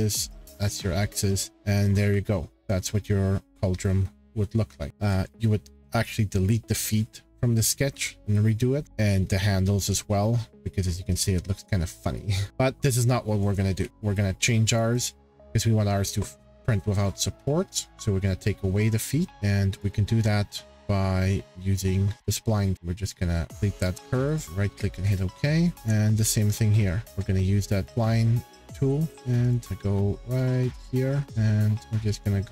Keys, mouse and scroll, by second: 0.3 click, 1.5 click, 3.5 click, 4.9-5.8 scroll, 7.1-7.4 scroll, 8.8 middle click, 9.1-9.4 scroll, 9.3 middle click, 10.7-11.3 shift+scroll, 12.1 shift+scroll, 13.4-14.0 scroll, 13.5 click, 13.8 Delete, 14.7 click, 15.0 click, 19.8 click, 20.1 scroll down 5, 20.5-21.8 scroll, 21.8 click, 22.7 ctrl+click, 23.1 click, 23.5 click, 24.3 right click, 24.4 click, 24.9-25.8 scroll, 25.8 click, 26.3 scroll, 27.0 scroll, 27.8 click, 29.1 Escape, 29.1 scroll, 29.5 click, 29.9-30.4 scroll, 30.4 click, 31.2 scroll, 31.2 ctrl+click, 32.3 click.